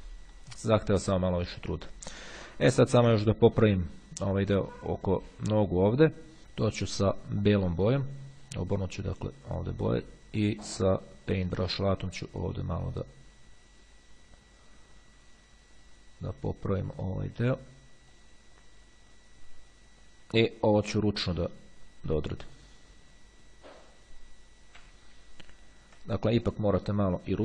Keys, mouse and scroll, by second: 0.6 click, 0.8 middle click, 2.4-3.0 ctrl+scroll up 2, 5.8 click, 8.0 click, 10.9 click, 12.4-17.5 drag, 17.7-18.9 drag, 21.6 click, 25.0 x, 25.5-26.4 ctrl+scroll up 2, 27.0-27.4 drag.